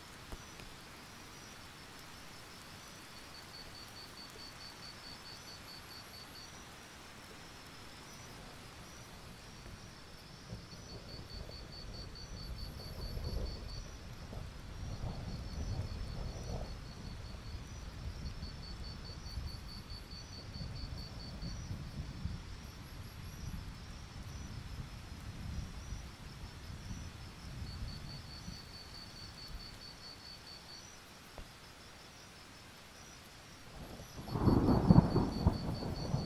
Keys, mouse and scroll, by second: 4.0 scroll up 1, 4.3 alt+scroll down 1, 4.5-5.9 scroll up 3, 5.9-6.9 scroll up 3, 6.9-7.2 scroll down 1, 7.2 click, 7.4-8.4 alt+scroll up 1, 8.4 right click, 8.6 click, 8.8-9.1 alt+scroll up 1, 9.1-10.2 drag, 14.9 click, 15.4-21.2 drag, 21.8-22.2 alt+scroll down 1, 22.2 click, 22.6-23.3 alt+scroll up 1, 23.3-24.7 drag, 25.4 alt+click, 27.9 ctrl+z, 28.4 ctrl+z, 28.9 click, 29.2-32.2 alt+drag, 32.4 alt+scroll down 1, 32.7 click, 33.4-34.2 alt+scroll up 1, 34.2-36.2 drag.